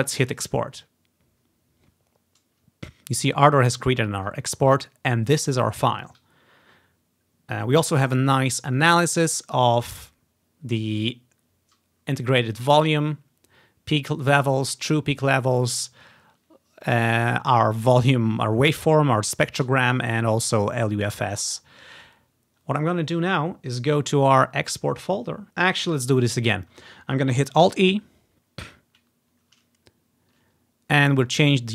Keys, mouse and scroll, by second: 0.5-2.2 drag, 8.9 click, 26.1 click, 26.2-27.5 drag, 27.8 alt+e.